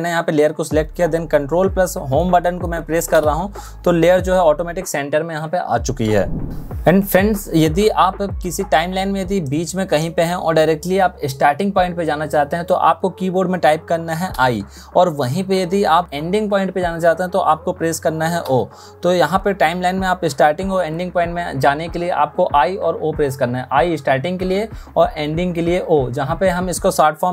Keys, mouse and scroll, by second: 14.0 i, 18.1 o.